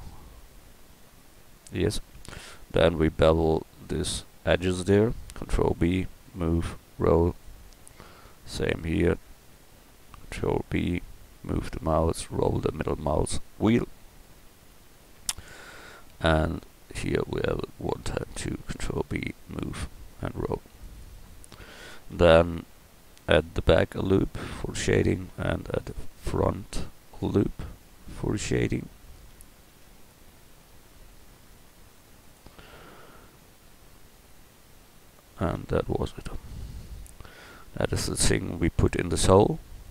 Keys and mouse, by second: 2.6-5.3 right drag, 5.3 ctrl+b, 10.5 ctrl+b, 16.9-18.4 right drag, 18.4 ctrl+b, 21.6-22.6 drag, 22.6 ctrl+r, 25.5 ctrl+r, 29.5 ctrl+r, 33.3 ctrl+r, 35.8 Tab, 38.8 middle click.